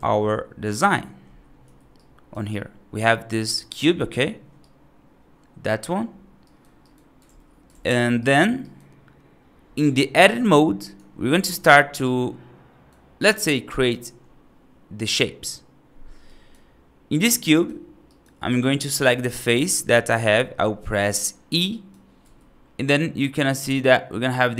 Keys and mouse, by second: 1.5 F2, 1.8-2.2 right drag, 2.4-3.2 right drag, 3.4-4.5 drag, 4.5-5.7 right drag, 6.3 right drag, 6.7 right drag, 8.0 right drag, 8.5 right drag, 10.2 click, 11.4 click, 11.9 right click, 13.1 right click, 16.1 right click, 17.3 right click, 17.9 right click, 19.6 right click, 20.5 middle click, 20.9 right click, 21.5 right click, 22.1 e.